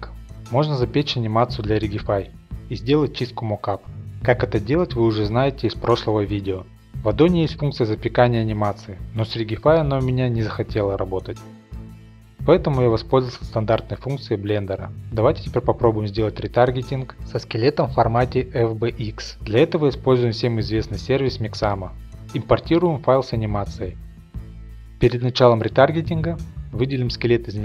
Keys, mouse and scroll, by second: 0.0 Return, 2.2-5.7 middle drag, 2.2 scroll, 2.4 scroll, 2.5-3.3 scroll, 3.3-4.0 scroll up 1, 4.0-5.6 scroll up 1, 5.6 scroll up 1, 6.1 click, 7.5-8.5 scroll, 8.6-8.9 drag, 9.7-10.7 drag, 11.3 click, 11.7 a, 12.2 click, 12.9 click, 13.5 click, 13.8 click, 14.4 click, 16.1-16.6 scroll, 16.4 click, 16.6 click, 17.8 click, 17.9-19.0 scroll, 19.0 click, 21.1 click, 21.4 click, 22.4 click, 22.8 click, 23.0 middle click, 23.2 middle click, 24.1 middle click, 24.4 middle click, 25.4 middle click, 26.3 shift+middle click, 26.6 click.